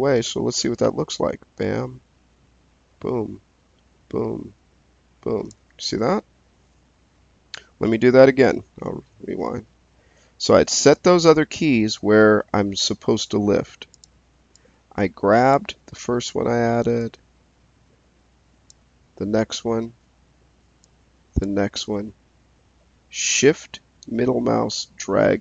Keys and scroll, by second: 8.5 z.